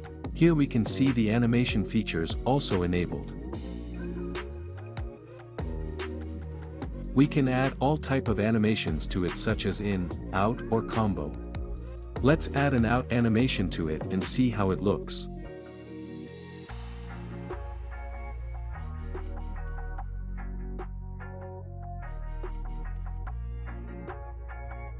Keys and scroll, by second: 13.1 space, 14.9 space, 20.9 space, 23.7 space.